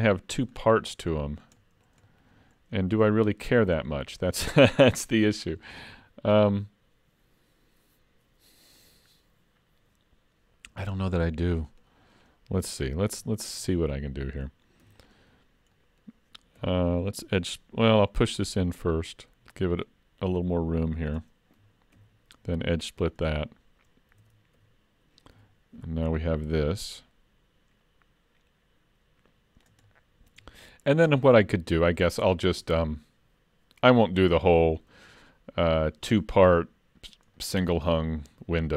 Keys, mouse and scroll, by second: 0.1 middle click, 0.2 shift+middle click, 0.6-1.6 scroll up 12, 1.1 shift+middle click, 1.6 middle click, 2.1 shift+middle click, 2.5-2.8 scroll up 12, 2.8 shift+middle click, 10.9 scroll down 3, 11.3 shift+middle click, 11.7 middle click, 12.2 click, 12.8 Tab, 13.3 shift+middle click, 13.7 middle click, 14.8 3, 15.0 click, 15.5-16.3 scroll up 2, 15.8 middle click, 16.6 2, 18.1 middle click, 18.1 scroll up 1, 19.1 click, 22.0 ctrl+e, 24.2 alt+a, 24.6 3, 25.3 l, 26.2 click, 29.9 middle click, 30.6 shift+middle click, 31.1 middle click, 31.7 shift+middle click, 36.3-36.8 scroll up 1, 37.0-37.4 scroll down 1, 37.4 middle click.